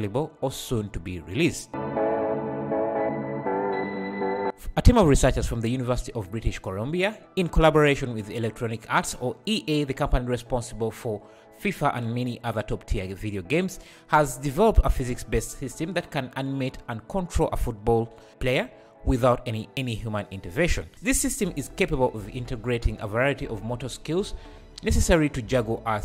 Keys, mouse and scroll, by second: 0.9 right click.